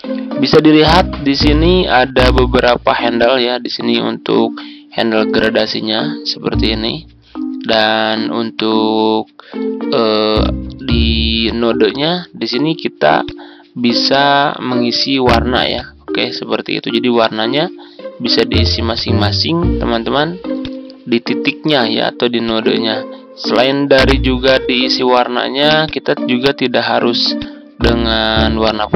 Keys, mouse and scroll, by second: 22.4-28.9 drag.